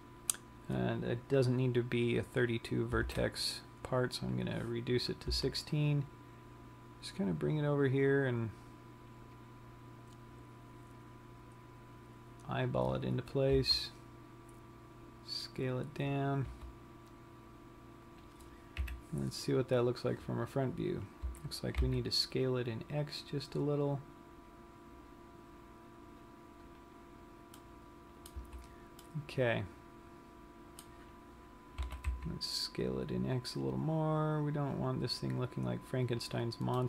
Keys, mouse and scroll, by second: 6.1 g, 9.4 g, 27.4 click, 28.1 middle click, 28.9 z, 29.5 middle click, 32.2 s, 36.5 click.